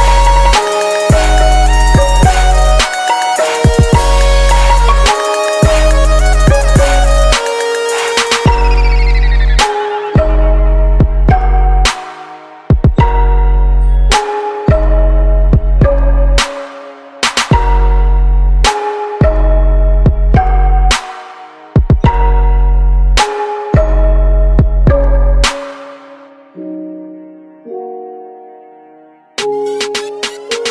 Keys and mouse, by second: 2.3-5.5 middle drag, 5.8-11.7 drag, 20.9-22.9 middle drag, 26.7-30.7 drag.